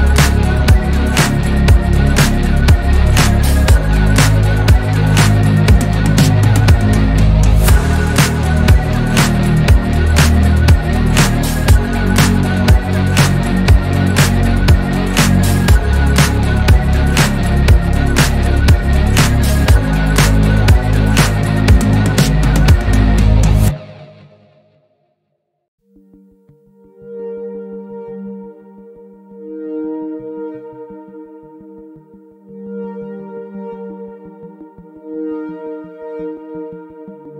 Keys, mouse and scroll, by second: 0.9 drag, 1.5-2.0 middle drag, 2.0 drag, 2.8 click, 3.1 Tab, 3.9 ctrl+r, 5.5 Tab, 5.7 click, 8.4-9.4 middle drag, 9.4 KP_1, 10.2 click, 10.5 Tab, 11.3-12.4 shift+middle drag, 12.4-14.4 scroll up 1, 14.4 scroll down 1, 14.7-17.1 middle drag, 18.7 3, 19.1 click, 19.5 shift+click, 19.8 shift+click, 20.1 shift+click, 22.9 click, 23.5-25.8 middle drag, 26.5 alt+click, 27.4 2, 27.9 alt+click, 28.8 ctrl+b, 34.1 click, 34.5 click, 35.4 3, 35.8 shift+click, 36.1 shift+click.